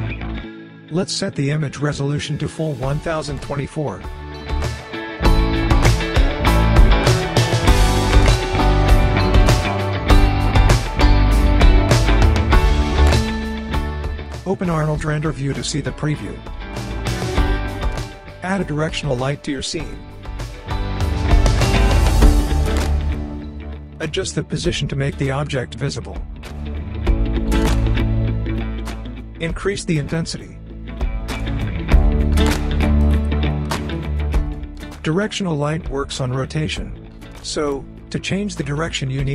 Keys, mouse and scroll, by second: 1.5-2.9 scroll down 1, 3.1 click, 7.1 click, 10.5 scroll down 1, 11.1-11.7 scroll down 1, 11.7-12.4 click, 12.5-13.0 scroll down 1, 13.0-13.6 scroll up 1, 14.0-15.8 drag, 20.0-21.0 scroll up 1, 21.0-22.3 drag, 23.2-23.5 scroll down 1, 24.8 e, 27.5-29.0 drag, 32.1 w, 32.8-33.4 drag, 35.3 e, 35.9-38.1 drag.